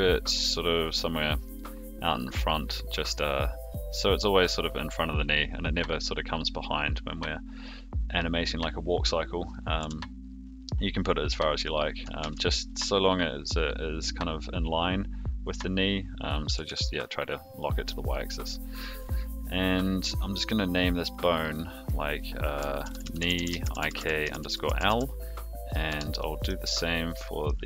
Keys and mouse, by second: 9.5 click, 9.8 g, 12.2 ctrl+z, 16.4 g, 19.0 click, 21.0 click, 22.2-26.0 drag, 23.3 e, 26.2 middle click, 27.1 middle click.